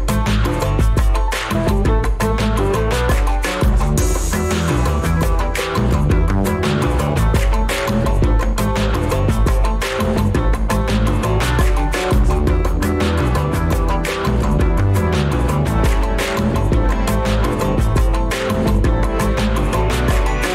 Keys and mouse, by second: 0.2 ctrl+z, 0.8 ctrl+z, 2.1 click, 4.2 Tab, 6.2 1, 6.5 1, 7.2 g, 15.4 click, 15.9 g, 18.4 shift+y, 19.2-20.5 right drag, 20.3 Escape.